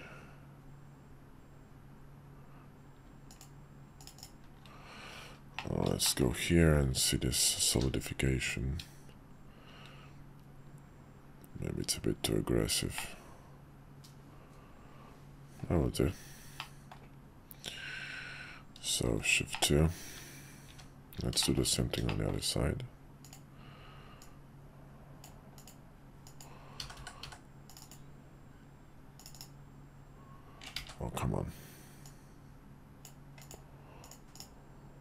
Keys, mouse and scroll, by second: 5.5-5.9 middle drag, 6.1 shift+middle click, 7.7 q, 12.9-15.6 middle drag, 16.6-16.9 middle drag, 19.1 shift+2, 19.5 middle drag, 20.1 `, 20.6 `, 21.4 shift+middle click, 22.0 shift+middle click, 23.2 click, 24.2-25.2 drag, 30.8 ctrl+z, 32.0-33.0 drag.